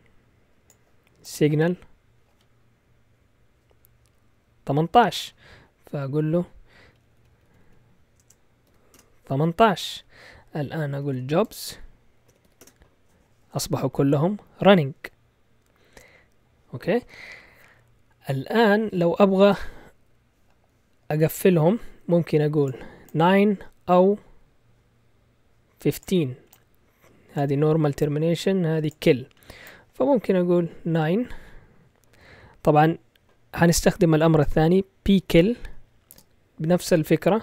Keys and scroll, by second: 6.8 Left, 7.0 Left, 7.1 Left, 7.3 Left, 7.4 Left, 7.6 Left, 8.2 BackSpace, 8.6 8, 8.9 Return, 10.6-12.9 typing, 34.9-36.1 typing, 37.3-37.4 typing.